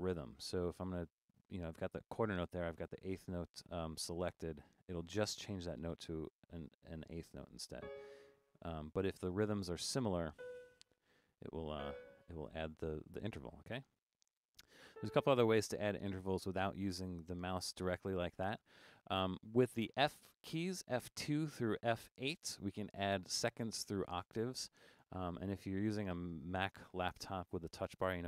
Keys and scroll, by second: 14.0 5.